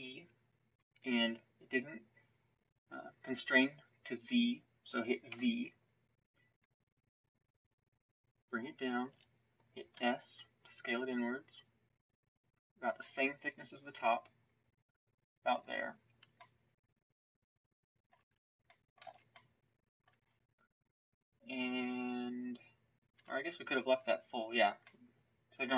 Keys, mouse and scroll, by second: 18.1 Tab, 19.0 z, 20.0 Tab, 23.1 f.